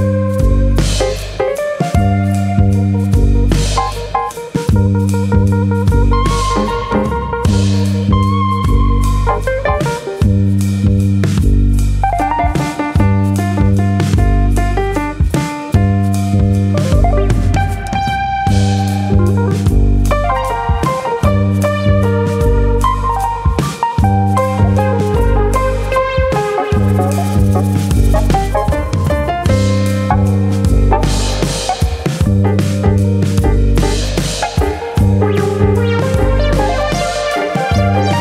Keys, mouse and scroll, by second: 0.4 alt+click, 0.8 s, 1.9 click, 2.9 alt+click, 3.3 s, 3.8 click, 4.5 1, 4.9 click, 6.0-7.3 scroll up 6, 6.9 click, 7.3 click, 7.9 scroll up 1, 8.0 middle click, 8.7 scroll up 2, 8.9 middle click, 9.2-9.9 scroll down 5, 9.4 shift+middle click, 10.3 middle click, 10.6 scroll down 1, 11.9 3, 12.1 click, 12.5 shift+click, 13.2 x, 14.8 middle click, 15.7 2, 16.2 alt+click, 17.0 click, 17.7-18.2 scroll down 7, 18.7 scroll down 1, 19.0 KP_1, 19.6-20.4 scroll up 4, 20.1 shift+middle click, 21.0 alt+click, 21.5 click, 23.2 s, 24.5 click, 24.8 alt+click, 25.1 s, 25.8 click, 26.8 r, 27.4 click, 29.5 3, 30.0 alt+click, 30.7 ctrl+KP_Add, 30.8 ctrl+KP_Add, 32.9 click, 33.8 click, 37.6 ctrl+KP_Subtract.